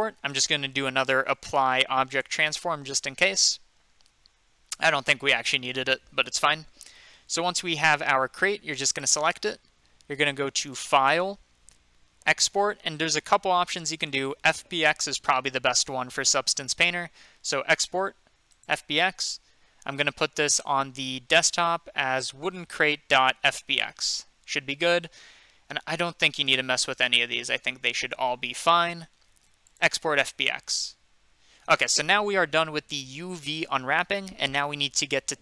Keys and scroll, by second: 1.0-1.9 typing, 2.2 Return.